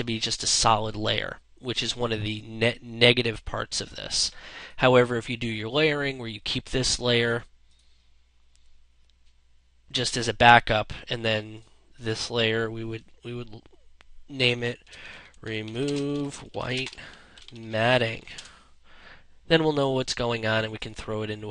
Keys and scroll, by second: 17.8 Return.